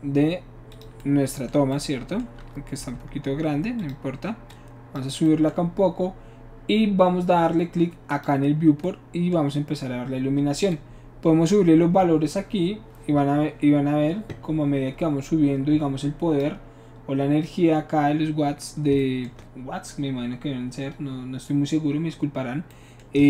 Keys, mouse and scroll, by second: 0.7 click, 2.9 s, 3.8 click, 4.5 click, 8.1 click, 10.7-16.4 drag.